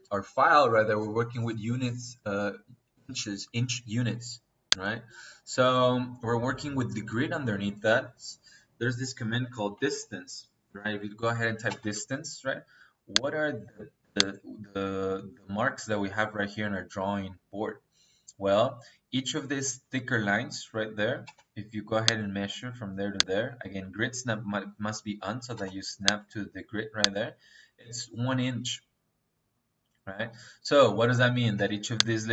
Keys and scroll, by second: 9.0 Escape, 9.5 d, 9.8 i, 9.9 s, 10.1 a, 11.5 space, 21.1 -, 25.4 -, 31.5 -.